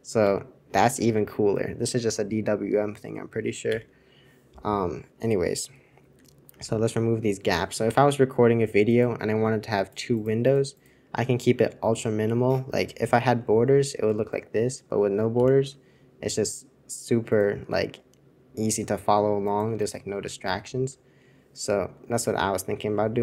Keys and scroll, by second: 0.2 super+1, 6.6 alt+super+u, 6.8 alt+super+u, 6.9 alt+super+u, 7.1 alt+super+u, 13.1 super+}, 15.3 super+{, 20.6 super+}, 22.1 super+c.